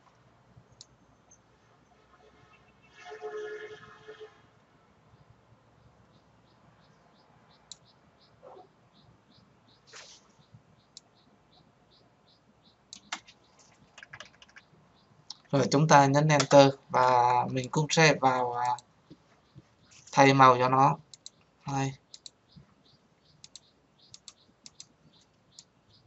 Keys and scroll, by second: 16.3 Return.